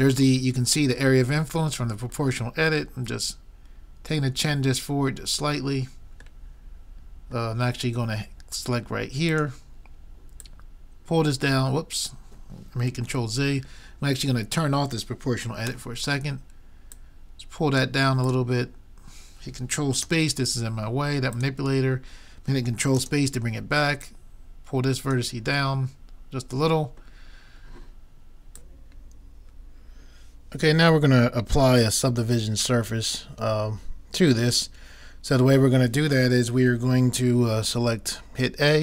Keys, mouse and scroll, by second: 6.4-9.7 middle drag, 9.3-12.2 drag, 13.1 ctrl+z, 15.7 o, 16.9-19.9 drag, 20.0 ctrl+space, 21.4-23.1 drag, 24.0-25.8 drag, 25.8-27.1 middle drag.